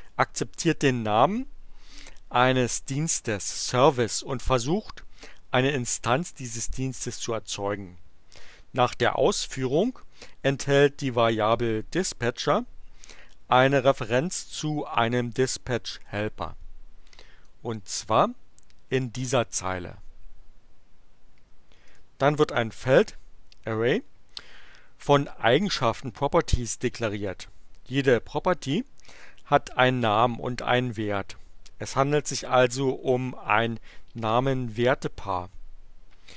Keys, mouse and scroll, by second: 17.5-19.6 drag, 21.8 click.